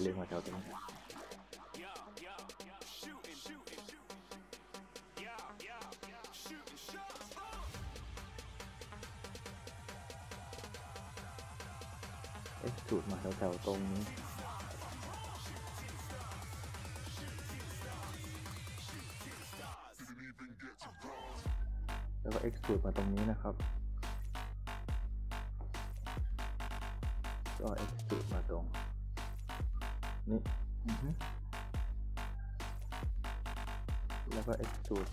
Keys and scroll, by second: 2.2-3.6 typing, 14.7-15.8 typing, 19.7-21.9 typing, 24.3-26.1 typing, 30.5 w, 30.9 d, 32.8 s.